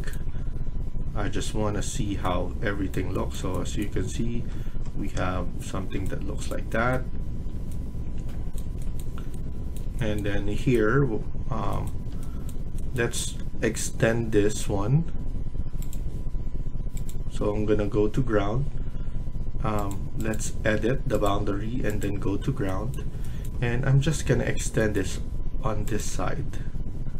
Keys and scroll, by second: 23.6 Escape.